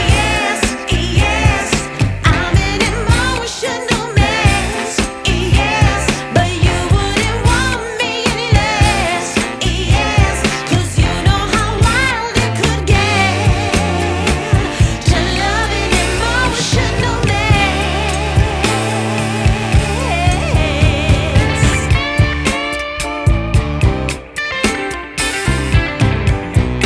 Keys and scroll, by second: 6.9 Return, 11.7 Return.